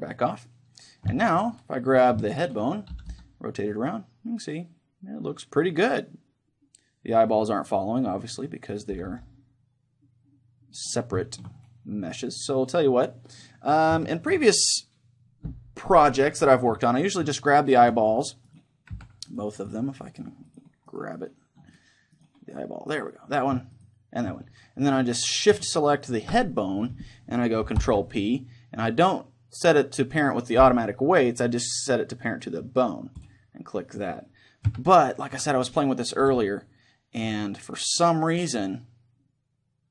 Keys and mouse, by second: 0.1-4.2 middle drag, 2.0-3.8 right drag, 2.9 r, 8.4-10.4 right drag, 9.0 r, 10.9 right click, 11.3-13.7 middle drag, 11.6-14.0 right drag, 14.0-16.9 middle drag, 17.4-25.6 right drag, 18.9 z, 26.0-28.3 right drag, 27.8 ctrl+p, 34.7 z, 35.4 a, 35.7-37.6 right drag, 36.3 r.